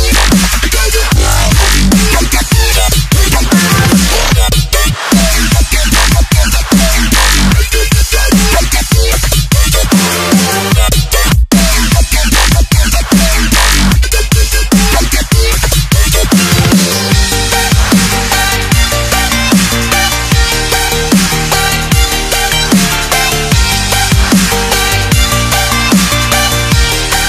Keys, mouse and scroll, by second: 1.7 alt+scroll up 1, 2.2 alt+scroll up 1, 2.8 alt+scroll up 1, 3.7-4.5 scroll down 1, 4.6-5.0 alt+scroll down 1, 5.2 alt+scroll up 1, 7.7 click, 12.0 Delete, 14.6 click, 14.7 super+e, 15.1 click, 15.2-15.8 scroll down 1, 15.8 click, 16.4 scroll down 1, 16.6 click, 18.3 right click, 21.7-22.1 alt+scroll up 1, 22.3 scroll up 1, 22.5 alt+scroll down 2, 23.4 Right, 23.7 click, 26.0 click.